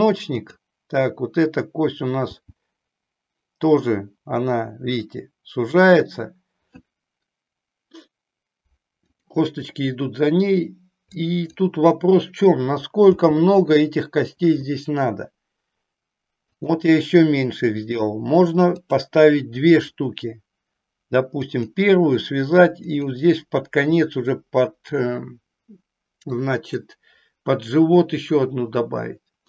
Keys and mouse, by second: 0.3 click, 2.2 g, 11.1 click, 13.1 g, 26.4 click.